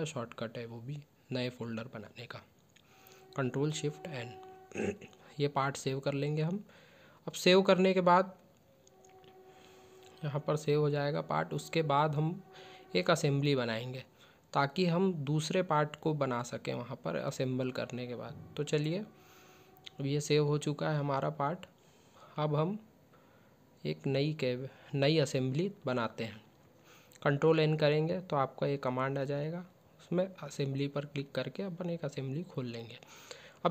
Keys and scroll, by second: 2.1 ctrl+shift+n, 15.9 ctrl+s, 17.8 ctrl+s, 26.0 ctrl+n.